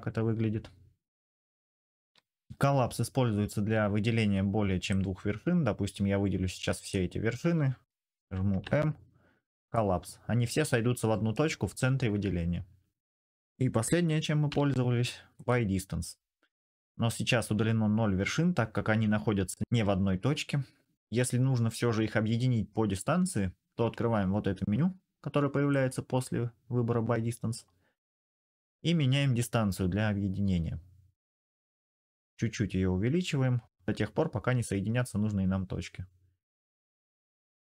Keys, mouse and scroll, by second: 0.7 click, 2.0 ctrl+z, 2.2 m, 5.3 click, 8.3 m, 9.4 click, 10.7 click, 13.0 ctrl+z, 14.3 m, 30.8 click, 34.6-36.2 drag.